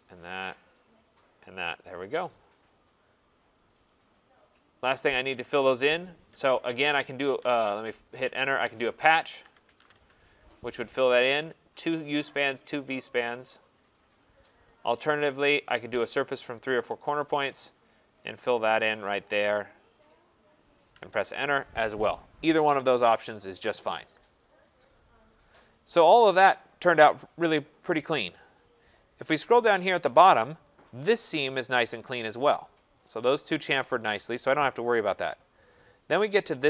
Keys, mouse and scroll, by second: 0.9 click, 1.6 scroll, 3.8 right click, 4.3 scroll, 6.9 p, 7.4 BackSpace, 7.7 Return, 9.0-10.8 typing, 15.1 right click, 16.0-16.8 scroll, 16.8 click, 18.3 click, 19.1 click, 19.9 click, 21.1 Return, 22.0 middle click, 22.7-23.7 scroll, 23.2 click, 25.4 right click, 25.7 scroll, 26.3-27.1 scroll, 29.0 scroll, 29.2 scroll down 4, 34.1 scroll down 2, 34.2-34.9 scroll, 35.0-36.6 scroll.